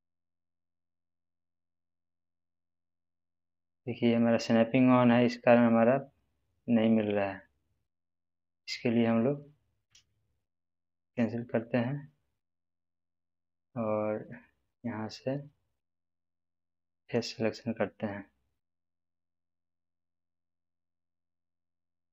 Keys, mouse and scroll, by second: 11.0 alt+d, 11.0 right click, 14.6 click, 17.0 click, 21.0 click.